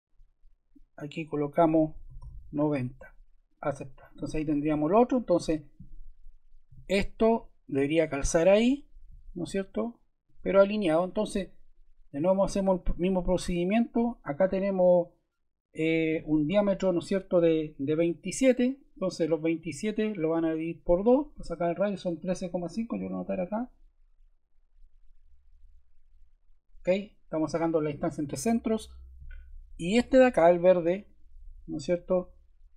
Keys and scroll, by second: 2.0 9, 28.9 Escape.